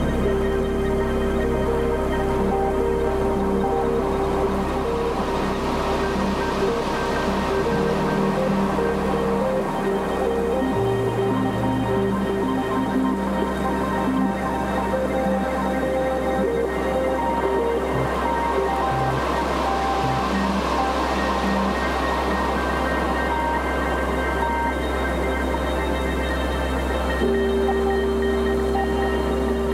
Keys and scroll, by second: 0.0 b, 2.4 [, 4.5-7.5 typing, 8.9 space, 9.8 ], 10.4 [, 12.0 ], 13.4-14.3 typing, 16.2-21.1 typing, 22.6 space, 23.5 space, 24.0 ], 25.2-29.4 typing.